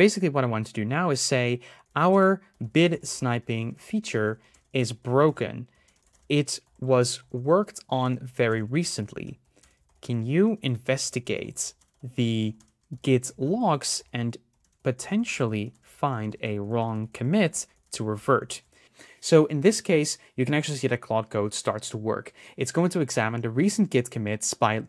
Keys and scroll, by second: 11.9 BackSpace.